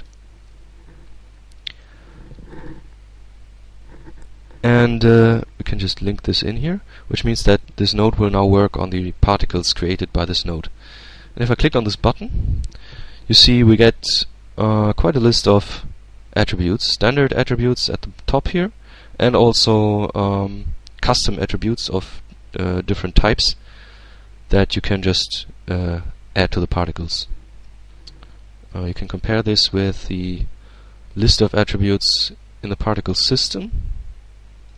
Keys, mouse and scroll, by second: 0.2-1.9 middle drag, 5.1-6.7 drag, 7.0-7.7 drag, 9.1-10.3 drag, 11.8 click, 28.4 middle click, 29.5 click, 31.4-34.7 drag.